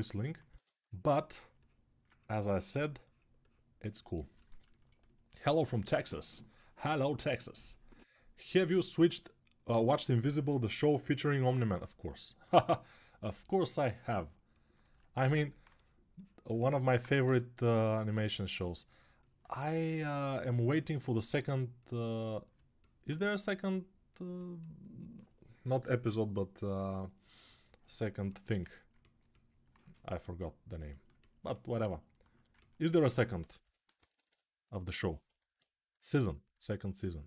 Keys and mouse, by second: 0.3 1, 8.5-22.3 ctrl+alt+right drag, 17.0 g, 33.4 g, 33.7 ], 33.9 ], 34.0 ].